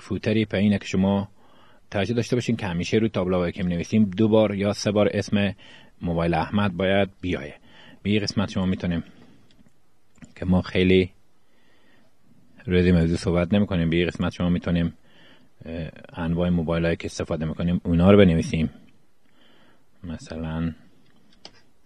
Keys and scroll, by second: 14.7-21.5 typing.